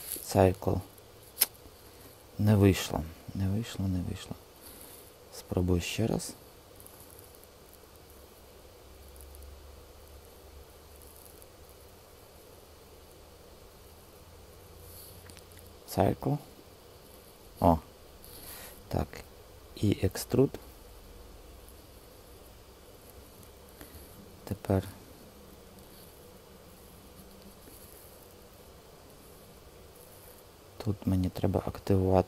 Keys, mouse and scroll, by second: 1.9 super+z, 2.5 super+z, 3.4 super+z, 6.2 click, 7.0 super+z, 10.1 click, 13.4-14.9 shift+drag, 19.5 e, 22.2 typing, 25.5 w, 26.4 w, 27.4 w, 28.0 w, 28.6 w, 31.8-32.2 drag.